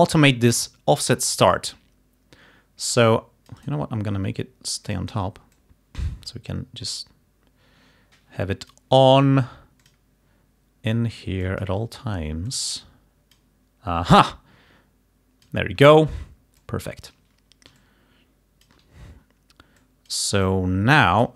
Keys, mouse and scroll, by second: 3.1 click, 3.7 right click, 5.0 click, 5.6 click, 14.1-15.7 drag, 16.7 click, 17.9 click, 18.1 click, 19.9 click, 20.6 click.